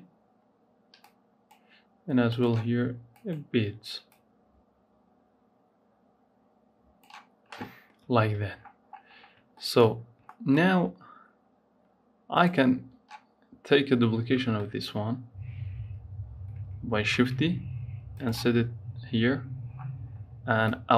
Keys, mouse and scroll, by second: 0.9-2.2 drag, 7.6 scroll down 3, 8.4-9.3 scroll down 18, 9.3 shift+middle click, 9.8 scroll up 3, 10.1-12.1 shift+middle drag, 12.1 click, 16.9 shift+d, 18.5-19.6 scroll up 3, 19.6-20.7 scroll down 7, 20.7 click.